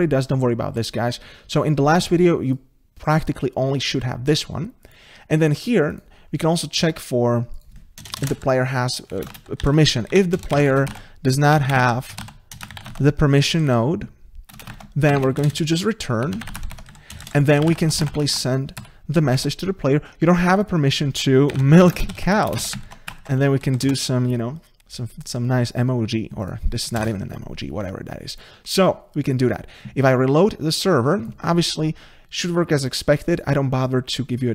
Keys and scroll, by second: 12.6 Return, 12.9 ctrl+v, 18.8 Escape, 20.5 Tab.